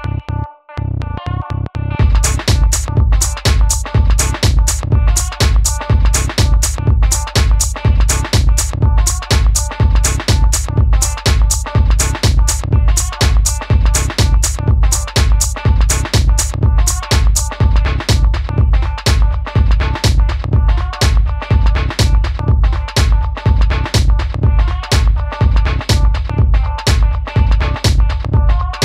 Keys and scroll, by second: 3.2 BackSpace, 7.1 super+d.